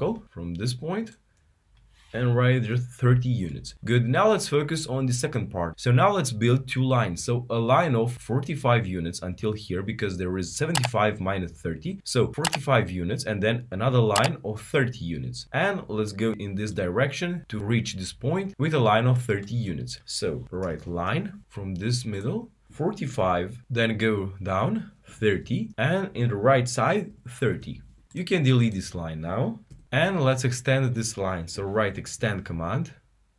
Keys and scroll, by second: 2.8-3.5 typing.